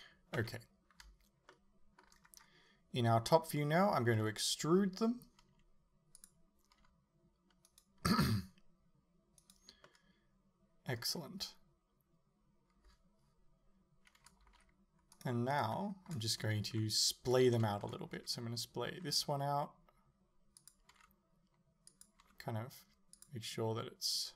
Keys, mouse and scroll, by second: 0.4 KP_7, 2.3-4.2 scroll down 2, 4.2 e, 6.3 click, 6.8 s, 7.8 right click, 8.1 s, 9.5 right click, 9.9-11.0 middle drag, 14.5 alt+s, 15.3 middle click, 15.6 right click, 16.8 KP_7, 17.6-20.7 shift+middle drag, 18.2 g, 20.7 click, 21.0 r, 22.1 click, 22.3 r, 23.3 click.